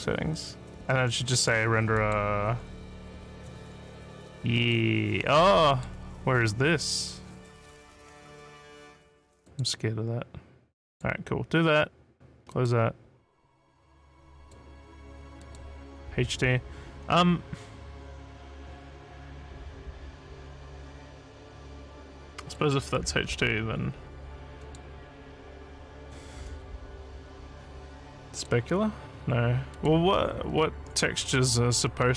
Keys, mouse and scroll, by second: 2.0 click, 3.3 click, 4.5 click, 5.7 click, 9.5 click, 10.9 click, 12.5 click, 14.4 click, 15.4 click, 22.6 click, 24.6 click, 28.3 click, 29.7 click, 30.8 scroll down 1.